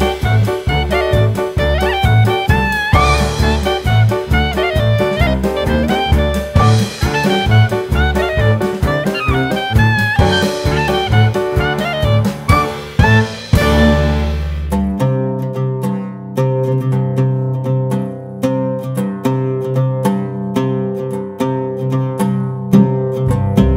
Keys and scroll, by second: 2.4 KP_1, 3.8 shift+d, 5.4 s, 7.9 g, 9.7 s, 12.0 g, 13.7 KP_1, 14.4 shift+a, 16.6 s, 17.5 g, 19.3 s, 20.4 g, 22.2 g, 23.5 s.